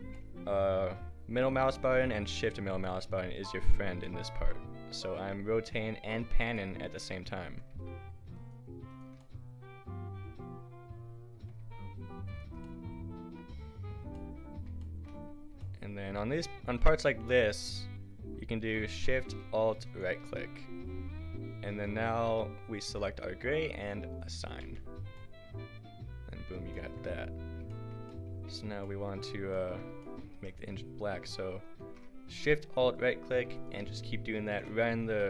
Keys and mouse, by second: 8.4-10.9 middle drag, 12.3-14.6 middle drag, 19.9 right click, 20.6-24.6 drag, 24.6 Tab, 25.4-26.5 drag, 30.3 Tab, 30.9 a, 33.0-34.8 drag, 34.8 right click.